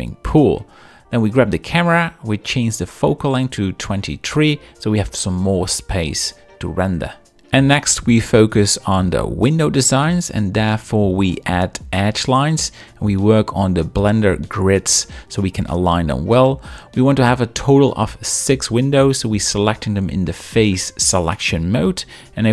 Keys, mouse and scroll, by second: 0.3 middle click, 0.8 shift+middle click, 1.1-2.5 drag, 6.4 click, 7.5 z, 7.8 middle click, 8.1 shift+middle click, 10.7 KP_7, 10.9 z, 11.1 shift+scroll, 12.9 ctrl+r, 12.9 click, 13.1 g, 13.6 ctrl+click, 14.0 ctrl+r, 14.1 click, 14.3 g, 18.6 3, 18.7 click, 19.6 shift+click, 20.1 shift+click, 20.9 shift+click, 21.5 shift+click, 22.0 shift+click.